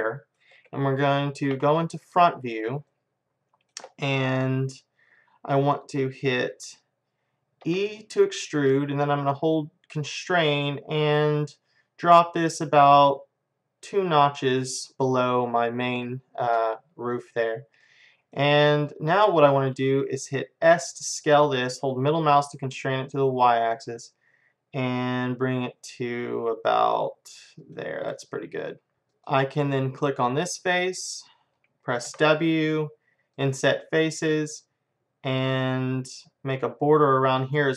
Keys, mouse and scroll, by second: 1.6 KP_1, 3.8-6.9 middle drag, 7.7 e, 17.9-21.6 middle drag, 20.7 s, 28.1 middle click, 29.1-31.0 drag, 32.1 w.